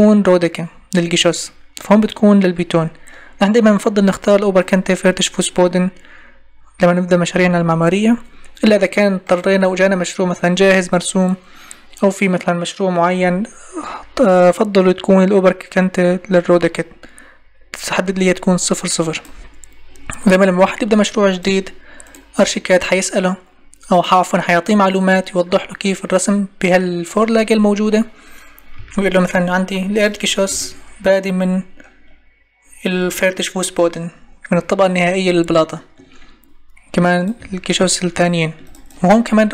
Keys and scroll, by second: 28.7 m.